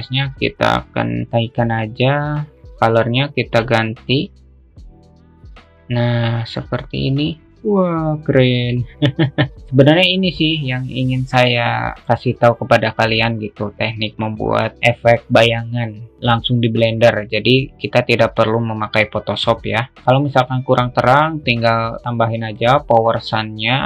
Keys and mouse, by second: 0.5-2.3 drag, 2.7-3.6 drag, 22.9-23.8 drag.